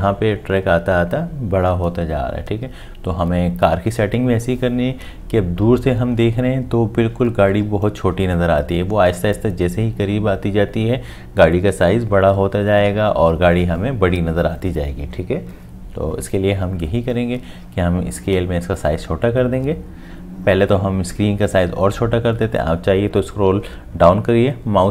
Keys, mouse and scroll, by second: 24.1-24.9 scroll down 1.